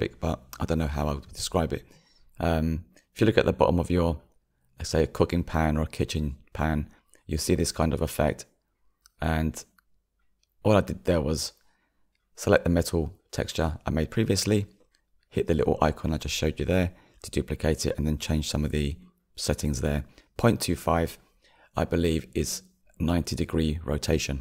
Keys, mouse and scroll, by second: 21.5-24.4 drag.